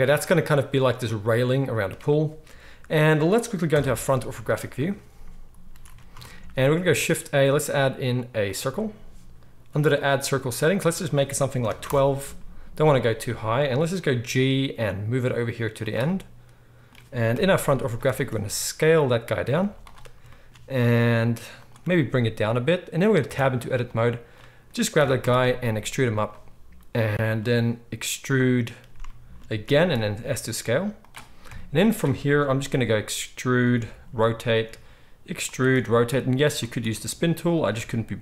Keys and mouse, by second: 3.7-4.3 drag, 3.7-4.3 right drag, 3.7 KP_1, 5.7 ctrl+s, 5.9 ctrl+s, 6.8 shift+a, 14.2 g, 15.7 click, 15.7-27.3 right drag, 17.3 KP_1, 18.1 s, 19.8 z, 20.7 s, 21.8 g, 23.2 Tab, 23.8-26.2 drag, 23.8-26.2 middle drag, 24.9 e, 27.3-32.8 drag, 29.6 e, 31.4 KP_1, 32.6 e, 32.8 right click, 32.9-38.2 drag, 34.0 r, 34.6 e, 35.6 r, 36.7 e, 37.7 r.